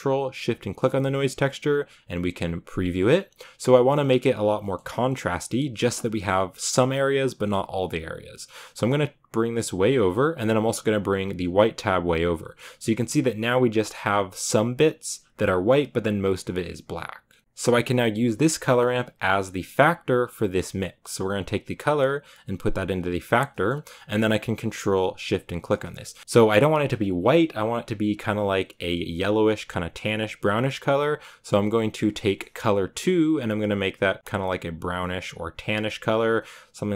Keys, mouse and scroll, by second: 6.6-23.5 drag, 23.5-25.1 middle drag, 25.1 ctrl+shift+click, 26.2-29.2 shift+middle drag, 29.2-30.5 drag, 34.1-35.6 drag.